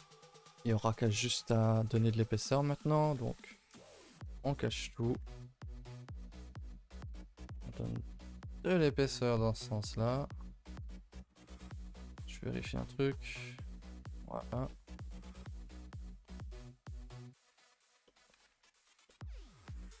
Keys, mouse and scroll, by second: 0.0-0.3 middle drag, 0.3 scroll down 4, 0.5-1.1 middle drag, 1.1-1.5 shift+right drag, 1.5 a, 1.6 a, 1.7-2.4 middle drag, 2.4 scroll up 1, 2.8 click, 3.8 h, 4.1 ctrl+s, 4.5 click, 4.7 Tab, 4.9 scroll up 4, 5.1 a, 5.3 a, 5.5 shift+middle click, 5.8 a, 6.0-7.1 middle drag, 7.1-7.5 scroll up 1, 7.5 e, 12.1 KP_7, 12.8 shift+middle click, 13.2-13.5 scroll up 2, 13.5 shift+middle click, 13.7 scroll down 3, 13.9 Tab, 14.1-14.6 middle drag, 14.6 a, 14.7 a, 15.0 z, 15.6 ctrl+s, 15.8-16.1 middle drag, 16.1 click, 16.7 click, 17.7 click, 18.0-18.3 middle drag, 18.3 a, 18.5 a, 18.6-19.7 middle drag, 19.7 click.